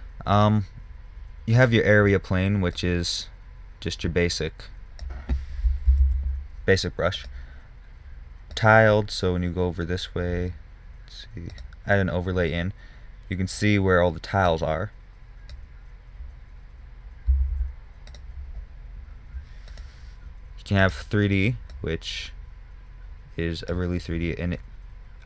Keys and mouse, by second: 0.8-3.1 middle drag, 3.1-6.5 drag, 6.5 ctrl+z, 7.6-9.8 drag, 12.0-16.2 drag, 16.6 drag, 17.9 ctrl+z, 18.5-24.0 drag, 24.5 middle click, 25.0-25.2 middle drag.